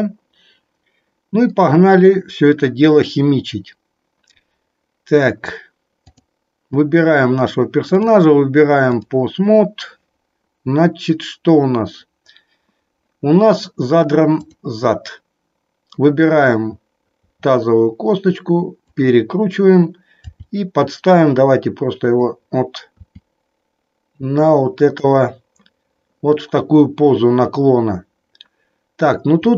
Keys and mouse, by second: 6.0 click, 8.0 click, 14.3 click, 17.1 r, 18.9 click, 20.2 g, 22.1 click, 25.0 click.